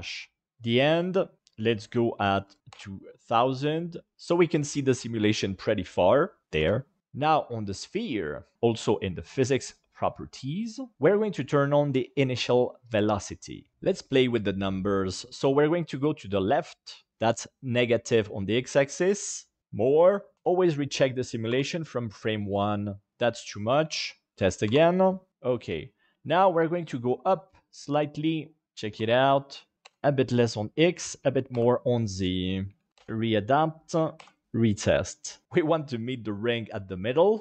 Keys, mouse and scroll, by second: 1.5-2.7 drag, 2.5 KP_0, 4.1 space, 6.5 space, 7.1 click, 10.0 middle click, 12.8 middle click, 17.5-19.3 drag, 19.6 click, 19.6 space, 21.5 space, 23.6 click, 24.6 space, 26.7-28.3 drag, 28.6 space, 29.7 click, 31.0 click, 32.3 click, 32.9 KP_1, 33.8 click, 34.4 space.